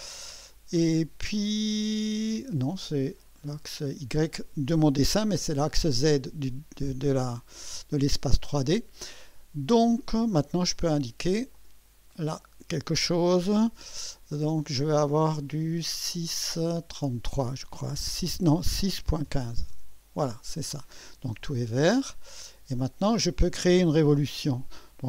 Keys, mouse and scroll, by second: 11.5 click, 18.2-19.9 typing, 22.7 click, 23.1 typing, 24.3 typing.